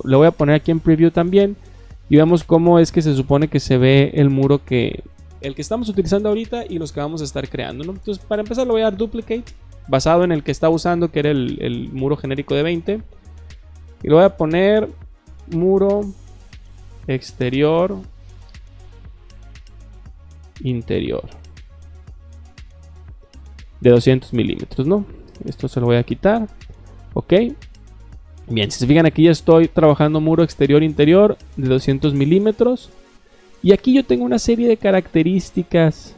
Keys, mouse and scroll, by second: 0.5 click, 4.2-4.5 drag, 8.8 click, 12.9 click, 13.8 click, 15.0-18.8 typing, 19.9 shift+t, 21.3-22.5 typing, 24.6 click, 25.5 BackSpace, 26.6 click, 34.6 middle click, 34.7 middle click.